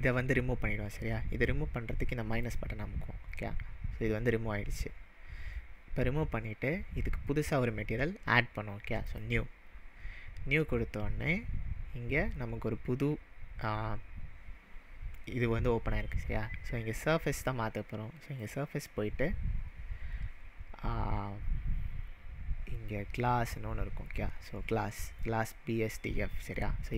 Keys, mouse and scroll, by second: 2.4-5.0 drag, 5.0-6.7 scroll up 1, 6.7-8.1 scroll up 1, 9.0 scroll up 1, 9.1-12.1 drag, 15.3-17.1 scroll down 1, 17.1 scroll down 1, 18.3 scroll down 1, 18.4-21.4 drag, 26.8 click.